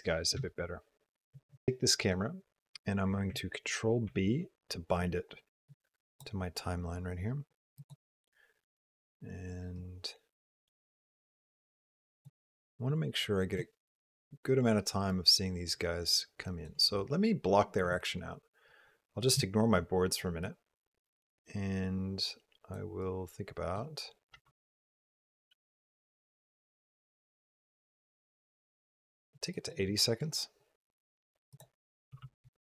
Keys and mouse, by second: 0.4 shift+click, 3.9 ctrl+b, 5.6 click, 7.6 click, 9.8-12.1 drag, 15.1-16.6 drag, 18.6 click, 19.1 click, 20.3-22.6 drag, 22.9 click, 24.2 space, 27.6 space, 29.4 click, 31.3-32.6 drag.